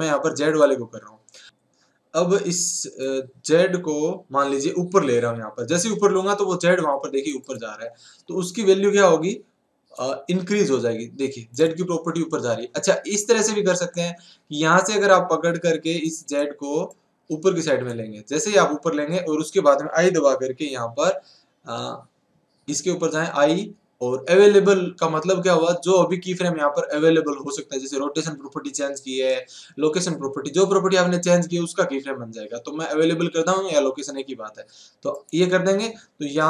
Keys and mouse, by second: 0.0-1.4 drag, 3.1-5.0 right drag, 10.2-13.0 right drag, 13.0-16.9 middle drag, 16.9 click, 16.9 right click.